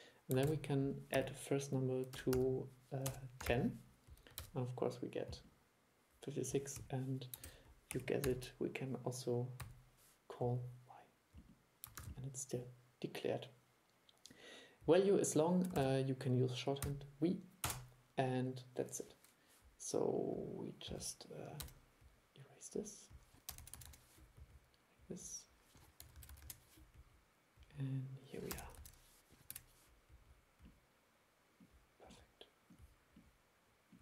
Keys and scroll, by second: 0.5 super+e, 4.5 super+e, 7.6 super+e, 12.1 super+e, 15.9 super+1.